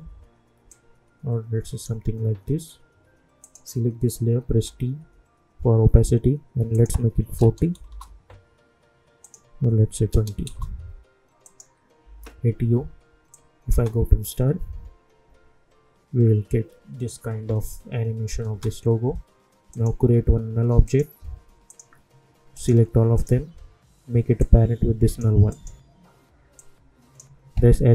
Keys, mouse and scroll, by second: 0.7-3.4 drag, 4.5 t, 6.7 click, 7.8 Return, 9.2 click, 10.4 Return, 11.4 click, 12.0 u, 13.3 click, 13.7 space, 18.4 space, 19.7 right click, 20.8 click, 23.1 shift+click, 24.7 click, 26.8-27.2 drag, 27.8 s.